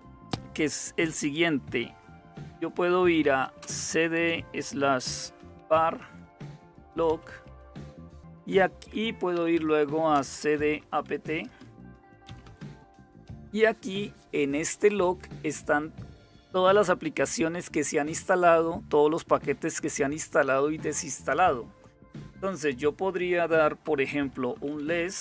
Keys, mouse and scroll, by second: 1.0 typing, 2.7-3.8 typing, 5.1-12.1 typing, 24.1-25.2 typing.